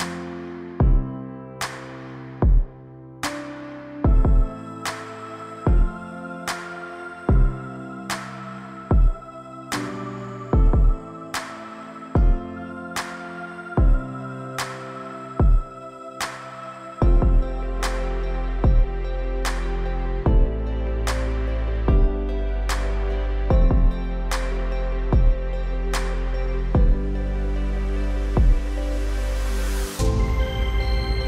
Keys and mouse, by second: 0.3 click, 0.8 click, 1.2 click, 2.3-3.8 typing, 2.4 click, 2.9 click, 4.0 click, 4.9 ctrl+z, 5.3 ], 5.4 click, 5.4 ], 5.9 ], 6.3 ctrl+z, 6.3 [, 6.3 click, 7.6 click, 8.1 click, 9.0 click, 12.1 click, 12.5 ctrl+z, 12.5-13.5 typing, 13.0 ctrl+z, 13.1 click, 13.6 click, 14.6 middle click, 15.3 middle click, 16.3 middle click, 16.8 middle click, 18.4 click, 19.5 click, 20.1 click, 20.6 click, 20.9 ctrl+z, 21.5 click, 22.1 click, 22.5 click, 23.6 ctrl+z, 23.6 click, 24.0-25.3 drag, 25.5 ctrl+z, 26.3 click, 26.7 ctrl+z, 27.2 click, 28.6 ctrl+z, 29.0 click, 29.3 click, 30.1 ctrl+z, 30.1-31.2 typing, 30.8 click.